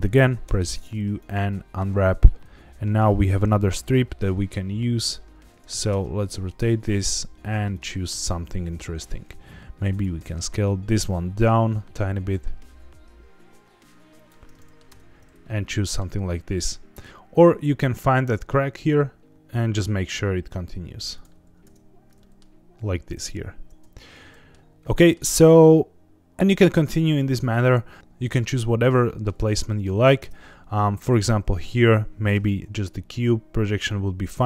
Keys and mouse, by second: 0.4 u, 2.4 a, 5.2 r, 5.5 KP_9, 5.6 KP_0, 5.9 KP_Enter, 6.8 g, 7.7 click, 8.9 s, 9.9 click, 10.2 g, 14.1 click, 14.5 middle click, 14.9 Tab, 15.4-16.0 middle drag, 16.9 Tab, 17.1 g, 17.5 g, 19.3 x, 19.3 c, 21.1 click, 21.6 Tab, 22.2 middle click, 24.1 middle click, 24.9 middle click, 27.4 click, 29.0 shift+middle drag, 29.7 middle click, 30.2 Tab, 31.1 a, 32.3 u.